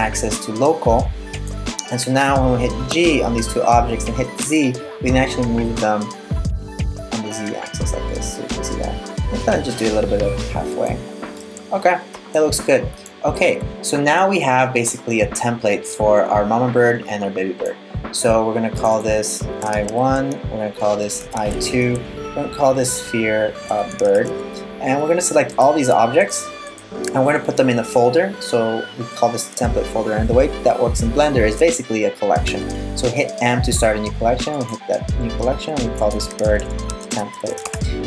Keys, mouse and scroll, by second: 2.5 g, 11.0 middle click, 14.1 middle click, 18.3 click, 18.5 click, 19.4 e, 20.1 click, 20.4 click, 20.8 e, 22.1 click, 22.4 click, 25.1 right click, 25.9 shift+right click, 26.3 shift+right click, 32.1 m.